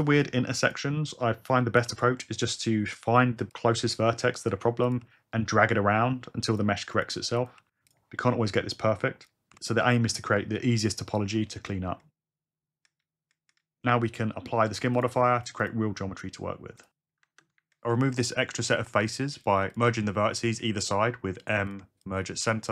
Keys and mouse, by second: 1.2 g, 1.2 o, 3.2 g, 3.5 click, 4.2 shift+middle click, 5.0 g, 6.5 click, 7.5 g, 7.9 click, 8.6 g, 9.2 click, 9.5 alt+z, 9.9 g, 10.6 alt+z, 11.2 alt+z, 15.0-15.7 drag, 17.2 Tab, 20.5 m, 21.2 ctrl+z, 21.7 click, 22.2 shift+r.